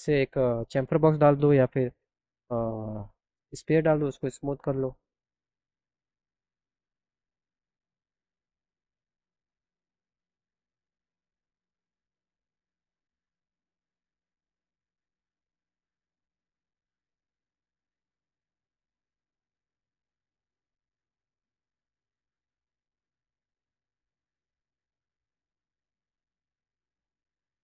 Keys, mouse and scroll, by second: 2.7 click, 3.6 click, 5.9 click, 6.1 click, 6.5 click, 7.6 click, 8.5-10.9 drag, 11.6 click, 12.3 click, 12.9 click, 13.4 click, 14.3 click, 14.9 click, 15.3 click, 16.2 click, 17.2 click, 18.1 click, 19.4 click, 20.4 click, 21.1 click, 23.0-24.2 drag.